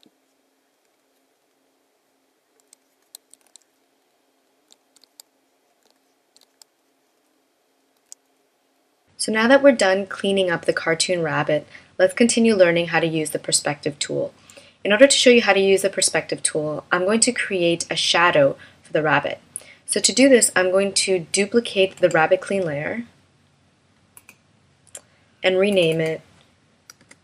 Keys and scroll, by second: 0.0 v, 2.7 space, 3.6 super+-, 5.0 space, 6.4 space, 8.2 shift+m.